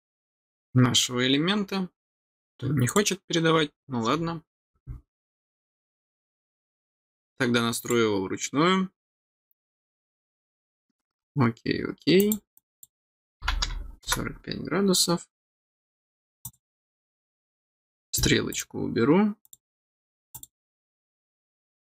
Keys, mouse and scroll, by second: 0.9-1.6 scroll down 3, 2.8 click, 7.8 click, 12.1 click, 12.5 click, 16.4 click, 18.5 click, 19.4 click, 20.3 click.